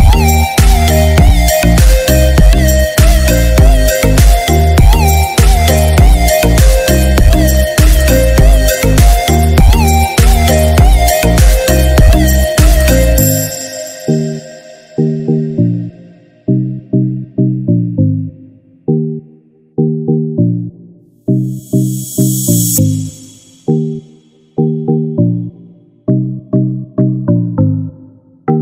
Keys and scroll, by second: 23.9 ctrl+j.